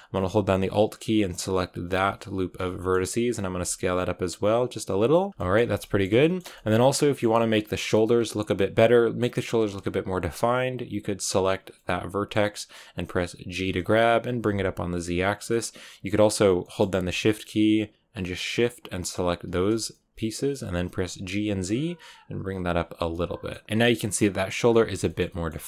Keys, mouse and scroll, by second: 2.2 alt+right click, 2.7 middle click, 3.4 s, 5.3 shift+middle click, 5.4 scroll down 2, 5.7 shift+middle click, 6.6-6.9 scroll up 4, 6.9-11.2 middle drag, 11.2 right click, 11.5 scroll down 3, 11.6-13.0 middle drag, 13.0 scroll up 2, 13.4 g, 15.4-18.2 middle drag, 18.2-19.8 shift+right drag, 19.8 middle click, 20.6 g, 22.9 Tab, 23.0 middle click, 23.4-23.8 scroll down 5, 23.6 shift+middle click, 24.5-25.0 scroll down 3, 25.0 shift+middle click.